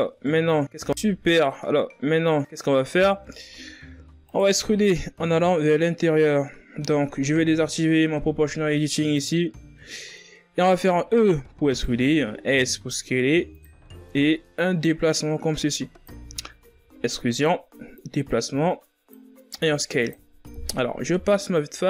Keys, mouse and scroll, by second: 0.1 scroll down 3, 0.3 Tab, 1.0-1.5 scroll down 3, 1.5-2.1 middle drag, 2.1-2.6 scroll up 4, 2.6 middle click, 3.3 Tab, 4.1 alt+right click, 4.5-7.5 middle drag, 9.0 click, 9.6 middle click, 10.3-10.9 scroll up 2, 10.9 e, 12.1 s, 13.7 middle click, 14.6-16.5 drag, 16.5 e, 17.8-19.3 drag, 19.3 s, 20.3 KP_1, 21.0 Tab, 21.5-21.8 scroll down 4.